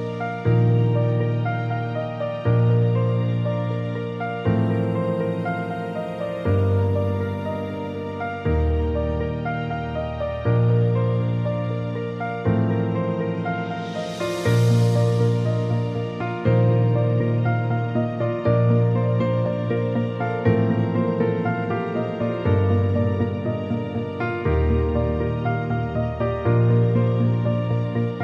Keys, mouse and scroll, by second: 3.5-6.3 scroll up 2, 7.3-8.6 scroll up 2, 12.6-14.3 scroll up 2, 15.2-16.8 scroll up 2.